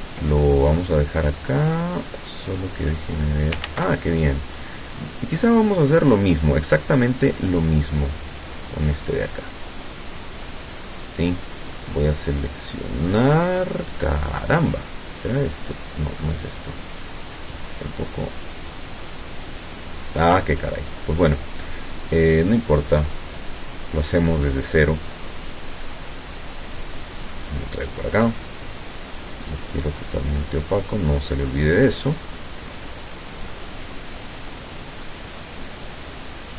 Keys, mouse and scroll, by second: 0.6 ctrl+click, 1.5 click, 2.0 click, 2.6 click, 3.7 ctrl+z, 9.6 click, 15.0 click, 16.6 click, 18.4 click, 23.1 click, 25.8-27.8 drag, 28.2 click, 29.6 click, 32.4-36.5 drag.